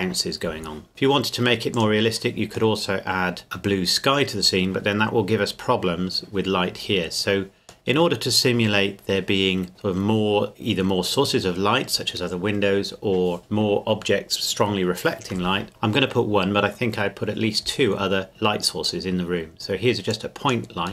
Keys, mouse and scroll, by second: 0.9 click, 2.8 middle click, 3.1 scroll up 1, 3.2 scroll down 1, 7.9 middle click, 18.8 click.